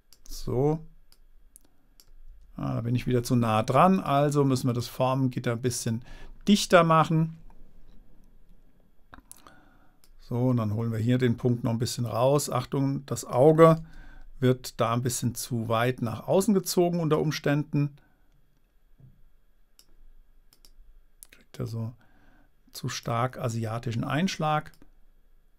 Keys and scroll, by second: 2.7 Return, 14.2 super++.